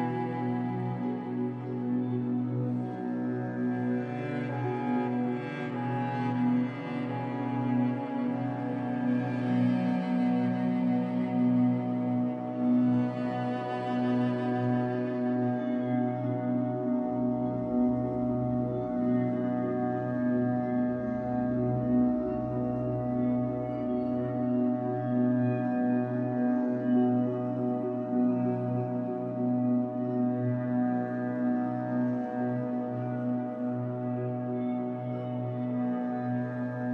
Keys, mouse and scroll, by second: 1.2 middle click, 1.5-1.9 scroll up 2, 1.9 click, 2.8 middle click, 3.2-4.5 drag, 4.5-5.6 middle drag, 5.2-5.6 scroll up 2, 5.6-7.5 drag, 7.3 scroll down 2, 7.5-12.5 middle drag, 12.5 click, 13.0-14.4 shift+middle drag, 13.5-14.4 scroll up 4, 14.4-17.8 drag, 17.8 middle click, 18.3 click, 19.2 middle click, 19.6 click, 20.4 middle click, 20.9 click, 21.7 middle click, 22.1-23.7 drag, 23.7-24.8 middle drag, 24.8-26.1 drag, 26.1 middle click, 26.8 click, 27.5 middle click, 28.4 click, 29.1 shift+middle click, 29.8-34.7 drag, 34.7-36.5 middle drag, 36.1-36.5 scroll up 2, 36.5-36.9 drag.